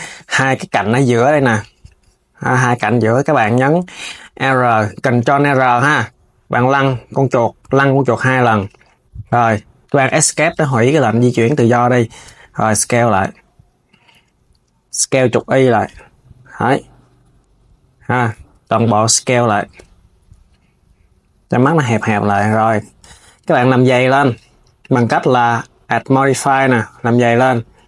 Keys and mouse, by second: 0.3 click, 4.1 r, 10.7 click, 11.6 shift+click, 12.3 s, 22.7 Tab, 23.8 click, 24.5-27.5 drag.